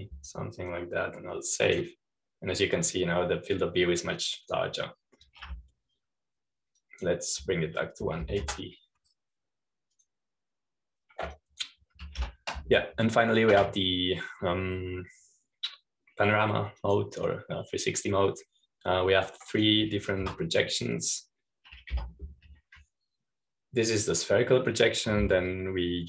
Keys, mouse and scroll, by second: 0.0-2.5 typing, 0.9 Num_Lock, 3.5 click, 4.8-7.3 drag, 7.4 typing, 8.7-9.9 drag, 9.9 KP_1, 10.1 KP_8, 10.3 KP_0, 11.9-12.9 drag, 13.3-14.3 drag, 14.1 ctrl+p, 18.7-21.7 drag, 22.1 Escape, 23.9 u.